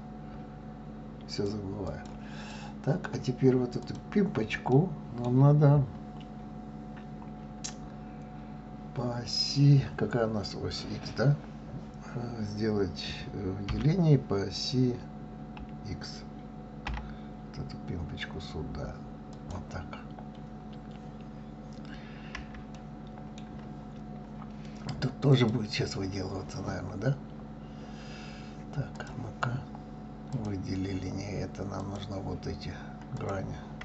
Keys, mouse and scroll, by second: 1.9 click, 2.5-3.8 middle drag, 3.8 click, 4.7-7.7 middle drag, 9.7 scroll down 4, 13.7 e, 19.9 scroll up 2, 20.6 scroll up 3, 22.0-22.7 scroll down 1, 22.7-23.8 shift+middle drag, 23.8-25.2 scroll up 2, 25.2 click, 28.9 click, 30.2 click, 31.7 click, 33.2 click.